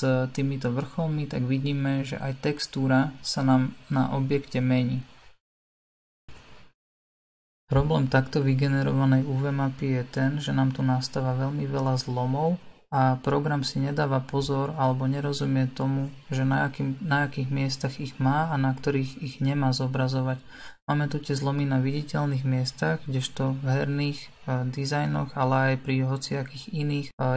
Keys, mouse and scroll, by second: 5.8 click, 6.4 middle click, 7.3-7.7 scroll up 2, 8.2 Tab, 10.3-27.3 middle drag.